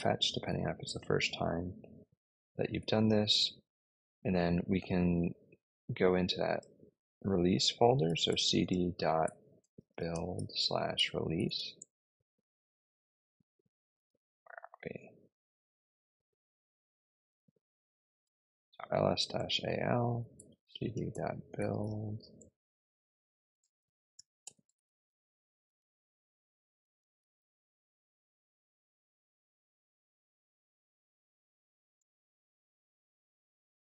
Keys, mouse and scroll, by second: 5.9-6.5 typing, 7.7-11.9 typing, 13.6-14.3 typing, 16.9-18.6 typing, 19.3 Return, 20.0-22.2 typing, 22.2 Return, 22.9 Tab, 23.2-27.7 typing, 31.9 Return.